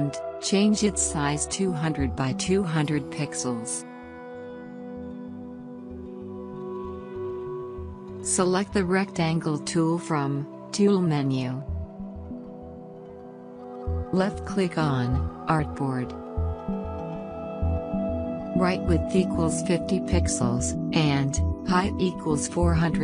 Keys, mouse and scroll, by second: 0.9-3.6 typing, 3.9 Return, 6.2 click, 9.0 right click, 11.0 click, 14.2 click, 19.0-19.8 typing, 21.0 Tab, 22.6-23.0 typing.